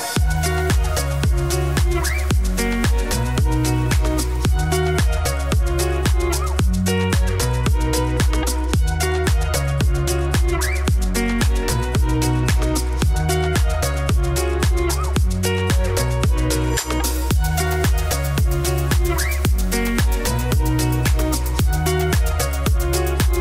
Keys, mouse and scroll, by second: 0.6 Tab, 1.0 shift+middle click, 1.7 scroll up 2, 1.9 shift+middle click, 2.6 click, 2.8 scroll down 1, 3.1 ctrl+r, 5.7 ctrl+b, 7.4 click, 7.9 2, 8.3 g, 9.7 click, 9.8 e, 10.4 Tab, 10.6-11.9 shift+middle drag, 11.9-12.5 scroll up 2, 12.5 ctrl+r, 13.6 ctrl+r, 14.6 3, 14.6 click, 14.8 e, 15.9 ctrl+r, 17.0 ctrl+r, 17.2 ctrl+b, 17.7 3, 17.9 click, 18.0 e, 19.3 Tab, 19.4-20.0 scroll down 2, 19.7 middle click, 20.0-21.2 shift+middle drag, 21.2 click, 21.5 middle click, 22.4 ctrl+s.